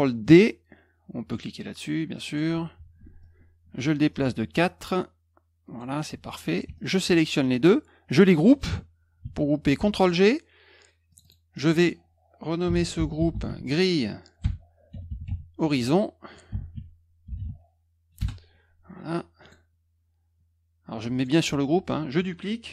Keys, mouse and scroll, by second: 2.2 click, 3.2-5.7 drag, 6.7 shift+click, 9.7 ctrl+g, 11.1 click, 11.2 click, 12.4-17.8 typing, 18.1 Return, 19.4 click, 21.1 click.